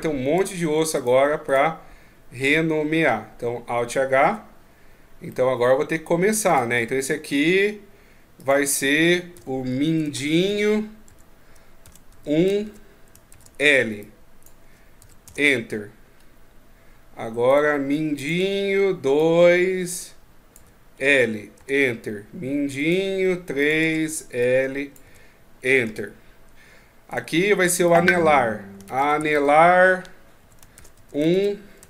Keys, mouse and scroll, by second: 0.1 Tab, 0.7 right click, 2.2 Tab, 4.0 alt+h, 4.4-5.2 scroll down 5, 5.1 middle click, 6.2 right click, 6.8 middle click, 8.1 click, 15.9-17.3 scroll up 3, 17.3 right click, 17.9 click, 22.5 right click, 23.4 click, 26.8 right click, 27.6 click.